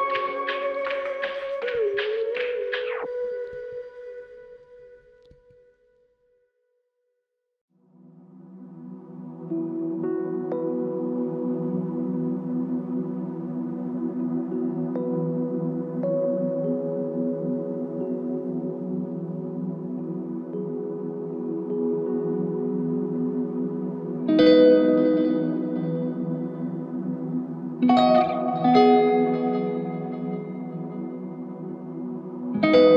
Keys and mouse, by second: 2.1 alt+click, 2.3 shift+click, 4.6 shift+click, 8.3 double click, 10.2 shift+click, 11.8 shift+click, 15.2 g, 16.6 double click, 18.6 alt+click, 21.0 double click, 21.4 alt+click, 23.0 double click, 26.5 alt+click, 31.0 double click, 31.9 alt+click.